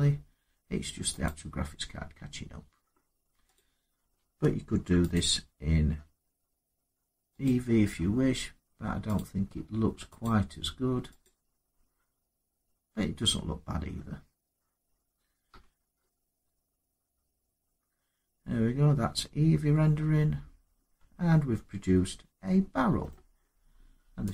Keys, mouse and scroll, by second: 1.0 click, 1.9 middle click, 2.0 middle click, 3.3 click, 4.4 ctrl+r, 4.9 click, 7.2 click, 9.0 click, 10.0 click, 11.0 click, 12.1 scroll, 15.3 Tab, 22.8 middle click, 24.1 click.